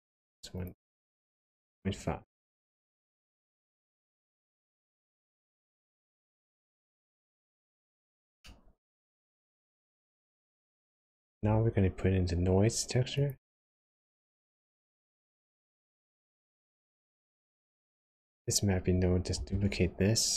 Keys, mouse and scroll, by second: 0.1 click, 0.6 click, 0.9 click, 7.5 click, 7.9-8.4 scroll up 1, 8.4 middle click, 9.5-10.3 scroll down 6, 10.3 middle click, 10.9 scroll down 1, 11.3 shift+a, 16.8 click, 18.3 click, 19.3 shift+d.